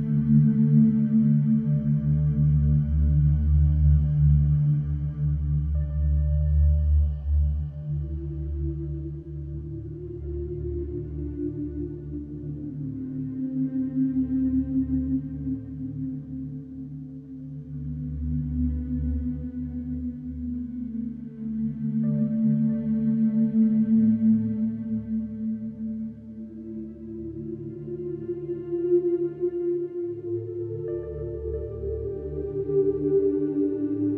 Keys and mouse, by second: 2.2 Tab, 4.6 Tab, 4.8 Tab, 5.6 Tab, 6.3 ctrl+a, 7.0 Tab, 7.1 alt+z, 9.1 alt+z, 10.0 ctrl+b, 11.2 Tab, 14.3 s, 14.4 y, 18.3 h, 19.2 KP_1, 20.4 Tab, 21.9 ctrl+r, 24.8 Escape, 26.4 ctrl+b, 31.4 shift+middle click, 32.3 ctrl+r, 33.9 Escape.